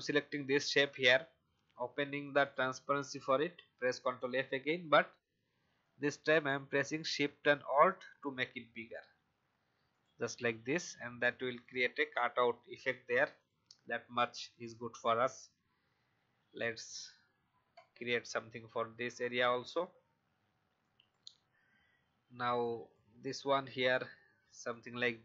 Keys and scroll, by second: 3.7 ctrl+f, 23.8 v.